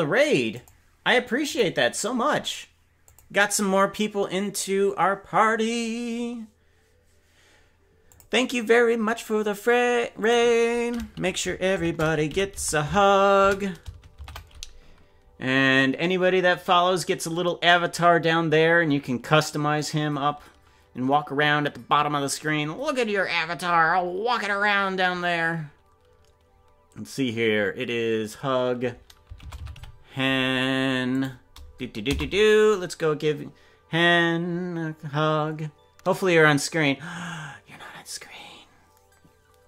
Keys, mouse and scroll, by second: 16.0 typing.